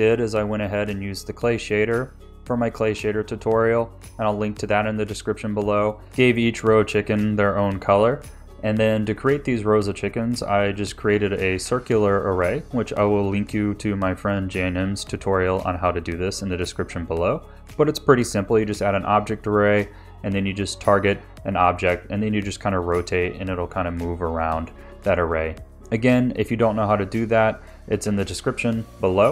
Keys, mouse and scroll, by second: 0.1 click, 0.1 click, 0.3 ctrl+s, 0.5 click, 0.5 BackSpace, 0.6 ctrl+s, 0.8 click, 1.0 ctrl+s, 1.0 click, 1.1 g, 1.3 g, 1.6 shift+click, 2.0 click, 2.4 click, 2.6 KP_2, 2.6 Tab, 2.6 click, 2.8 click, 3.0 ctrl+s, 3.0 scroll up 3, 3.2 scroll down 2, 3.2 shift+d, 3.4 ctrl+s, 3.4 click, 3.6 scroll up 1, 4.3 ctrl+s.